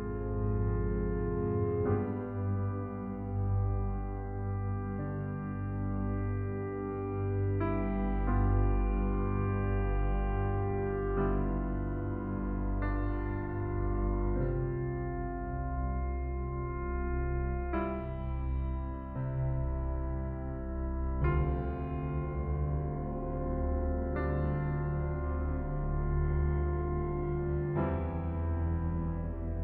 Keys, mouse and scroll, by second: 1.2 Return, 1.5-1.9 scroll up 1, 2.8-3.1 scroll down 1, 5.2 right click, 9.6 click, 10.7-11.1 scroll up 1, 13.1 click, 15.8 click.